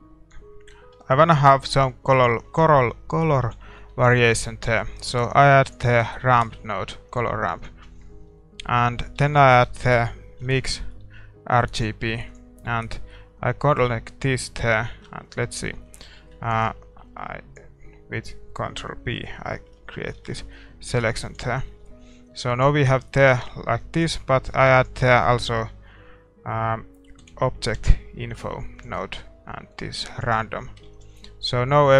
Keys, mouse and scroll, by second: 15.7-17.6 drag, 16.2-20.4 middle drag, 17.6 ctrl+b, 20.4 shift+z, 31.3 ctrl+s, 31.3 middle click.